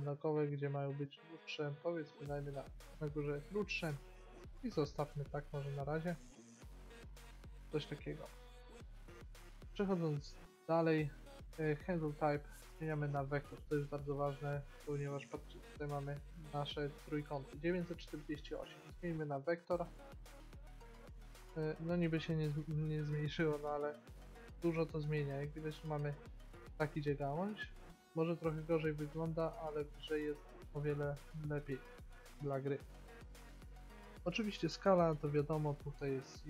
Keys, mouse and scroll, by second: 3.7 middle click, 7.8-9.1 middle drag, 9.5 middle click, 12.8-14.8 drag, 18.6-20.3 drag, 21.3 middle click, 21.9 middle click, 25.2 middle click, 27.5-29.8 drag, 30.1-31.8 drag.